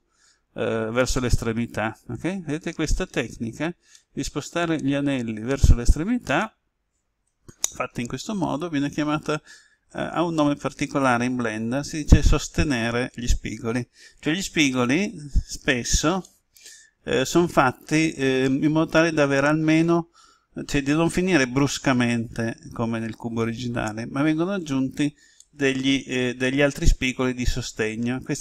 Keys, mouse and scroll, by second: 3.1 click, 3.9-28.4 middle drag.